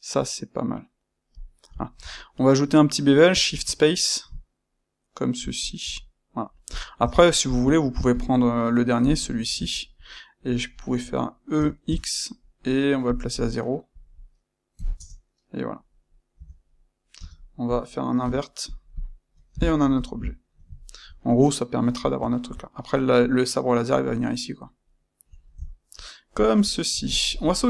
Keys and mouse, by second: 6.7 click, 6.9 Tab, 7.4 click, 8.1 click, 8.3 middle click, 9.0 click, 9.1-13.0 ctrl+middle drag, 11.5 e, 13.0 click, 13.9-15.7 drag, 14.9 KP_Enter, 15.7-18.9 middle drag, 16.3 Tab, 17.1 space, 18.9 drag, 18.9-19.7 middle drag, 19.7 KP_Divide, 20.7-27.6 ctrl+middle drag.